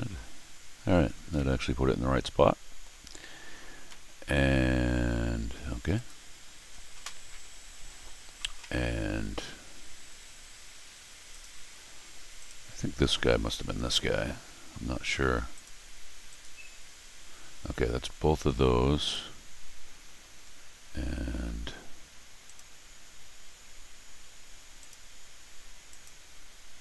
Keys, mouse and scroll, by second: 1.1 middle click, 1.3-2.8 middle drag, 3.7 scroll up 2, 3.8 middle click, 5.9 click, 7.4 scroll down 2, 7.9 scroll up 2, 11.3 click, 12.4 click, 15.5 click, 16.3 click, 19.0 click, 20.4 middle click, 22.4 click, 24.8 click, 25.9 click.